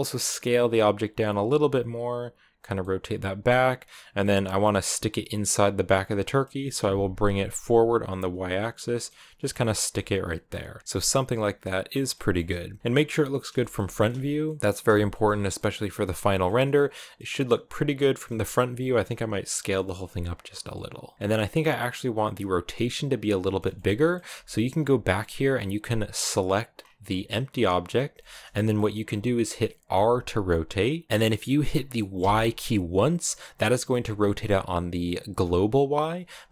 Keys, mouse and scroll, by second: 1.2 r, 1.5 g, 2.6-4.2 middle drag, 4.2 scroll up 1, 4.3-5.7 middle drag, 5.7 scroll up 1, 6.0 middle click, 6.8 g, 8.9-10.5 middle drag, 10.5 g, 10.8 middle click, 11.8 scroll down 1, 11.9 middle click, 12.8-13.1 scroll up 2, 13.1-15.1 shift+middle drag, 15.1 scroll down 2, 15.4-18.5 middle drag, 18.5 s, 21.1-24.6 middle drag, 24.6-26.1 scroll up 2, 26.1 right click, 26.6 scroll down 2, 26.8-29.7 middle drag, 29.7 r.